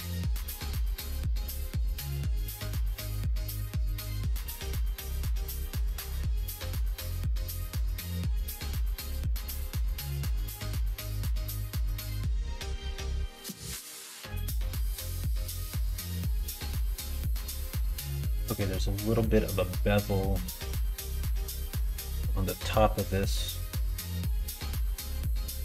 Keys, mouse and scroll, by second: 2.7 click, 2.9 middle click, 3.2 Tab, 3.5 click, 4.0 middle click, 5.3 click, 5.5 middle click, 6.9 shift+middle click, 7.3 middle click, 8.2 /, 9.4-12.2 middle drag, 14.1 middle click, 14.9 middle click, 16.0 middle click, 16.6 shift+middle click, 17.3 middle click.